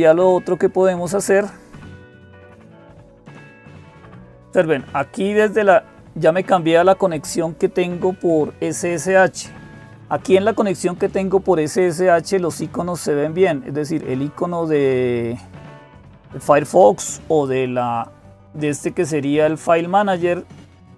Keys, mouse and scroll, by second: 0.0-20.9 typing, 0.0 click, 3.0 click, 4.8 click, 11.8-13.8 scroll down 2, 13.8-14.5 scroll down 1, 14.5 scroll down 1, 17.8-19.6 drag.